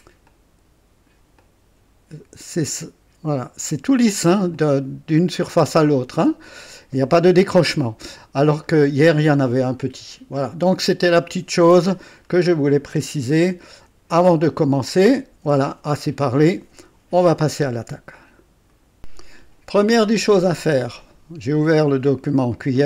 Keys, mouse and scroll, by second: 0.3 click, 1.4-3.1 drag, 4.5 click, 6.1 click, 6.7-7.7 typing, 7.7 click, 9.5-11.2 drag, 11.7 KP_0, 12.2-12.5 scroll down 1, 12.8 right click, 15.4 &, 18.7 right click, 19.0 click.